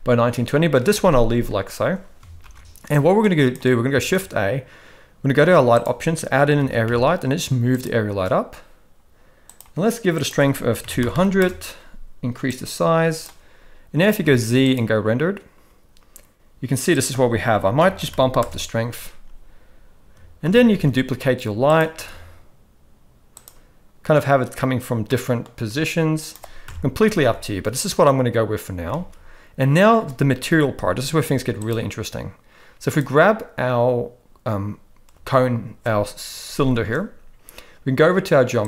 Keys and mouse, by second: 2.4 ctrl+b, 3.9 shift+a, 6.6 g, 10.2-11.4 drag, 11.1 0, 12.6 click, 14.2 z, 16.9-18.4 drag, 18.1 0, 20.4 shift+d, 21.9 r, 25.0-25.4 middle drag, 25.7 g, 26.6 KP_0, 27.1 ctrl+s, 27.2 ctrl+s, 28.9 ctrl+s, 31.2 z, 32.9 click, 35.1 space, 36.8 space.